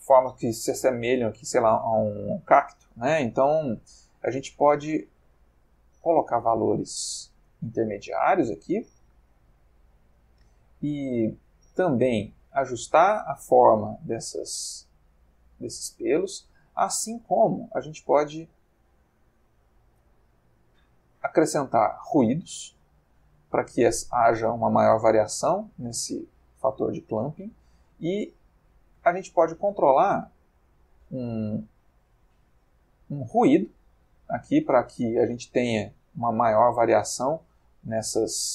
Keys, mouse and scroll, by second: 0.2-0.9 middle drag, 1.4 ctrl+middle click, 3.5-9.2 drag, 10.5-16.3 drag, 16.7 middle click, 19.3 middle click, 21.1 click, 23.0 click, 23.8-26.8 drag, 27.2 click, 27.9 middle click, 28.6 click, 30.2 click, 30.6 middle click, 32.2-38.5 drag.